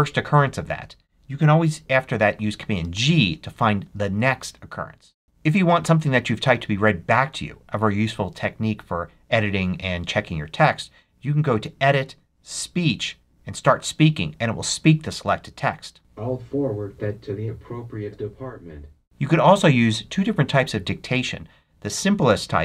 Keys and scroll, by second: 2.7 super+g.